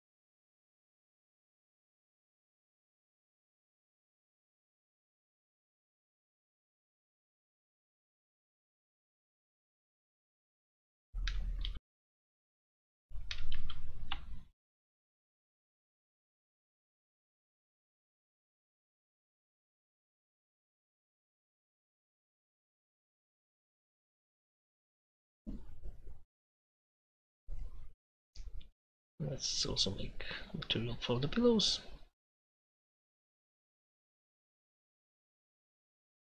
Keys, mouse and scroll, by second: 10.3-11.7 drag, 33.8 l.